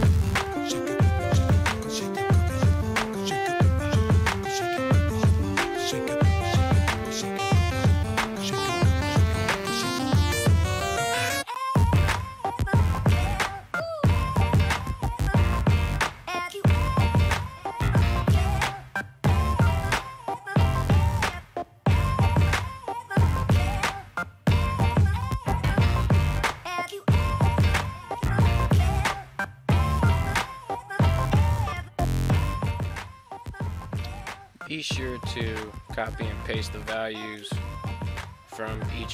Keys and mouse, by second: 0.5 ctrl+v, 1.0 right click, 1.7 ctrl+v, 2.2 right click, 2.5 right click, 3.5 click, 4.2 ctrl+c, 5.0 click, 5.7 ctrl+v, 7.5 ctrl+click, 7.8 click, 8.4 ctrl+v, 8.8 click, 9.2 ctrl+v, 9.8 middle click, 10.2 click, 10.6 ctrl+v, 10.9 middle click, 12.0 click, 12.6 right drag, 12.8 middle drag, 13.0 r, 13.4 r, 17.0 right click, 17.9 right click, 19.3 right click, 19.7 right click, 21.5 right click, 23.2 right click, 23.5 right click, 24.6 right click, 25.7 right click, 26.2 right click, 28.2 ctrl+c, 28.6 right click, 29.5 ctrl+v, 30.0 right click, 30.6 ctrl+v, 31.3 right click, 31.9 ctrl+v, 32.3 click, 35.2 ctrl+v, 37.7 click.